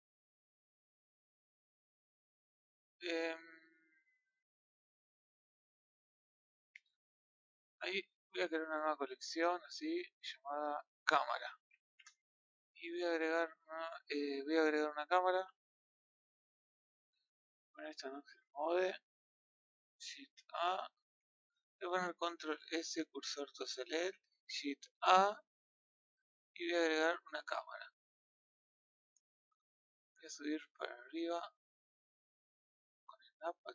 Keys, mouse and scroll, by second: 7.2 click, 9.8 right click, 10.5-23.0 drag, 23.0 shift+s, 28.9-31.0 middle drag, 31.0 click, 31.5 click, 32.4 right click, 33.5 click.